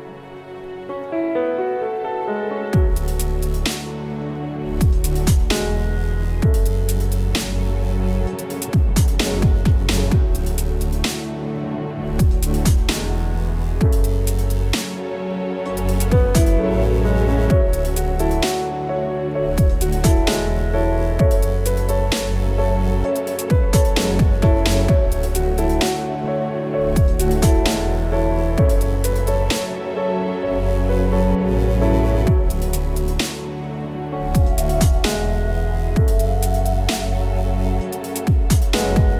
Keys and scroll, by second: 5.9 alt+KP_Decimal, 7.4 j, 31.3 space.